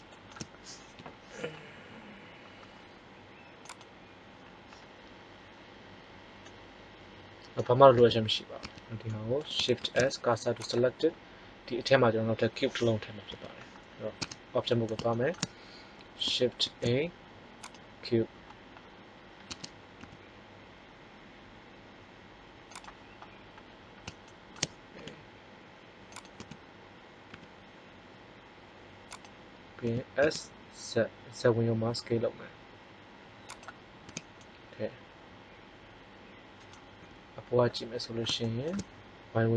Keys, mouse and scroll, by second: 0.9 t, 3.5-5.4 drag, 6.4 middle click, 7.9 Tab, 8.5 Tab, 9.7 shift+s, 13.2 KP_1, 14.1 Tab, 16.7 shift+a, 19.4 Tab, 19.9 s, 24.9 s, 26.3 z, 27.2 s, 29.2 click, 29.7 s, 33.6 click, 33.9 z, 37.0 KP_7.